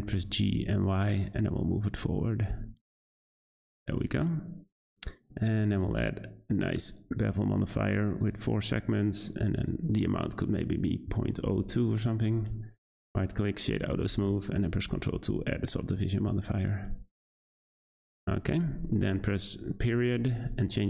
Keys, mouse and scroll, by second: 4.0-5.0 middle drag, 5.0-5.7 scroll up 2, 6.9 click, 7.2-8.1 scroll up 2, 8.1-9.3 drag, 9.6-12.6 drag, 12.7-13.8 right drag, 13.8 click, 14.9 ctrl+2, 15.6-16.0 scroll down 2, 16.0 click, 16.4-18.5 scroll down 4, 18.5-19.8 scroll up 2, 19.8 ..